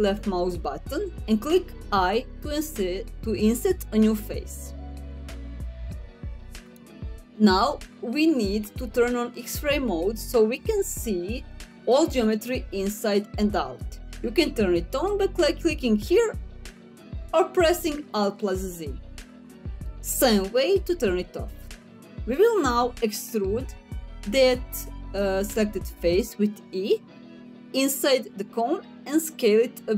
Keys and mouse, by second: 1.6 i, 6.2 click, 8.6 middle click, 12.0 click, 13.5-14.5 middle drag, 19.5 middle click, 25.1 e.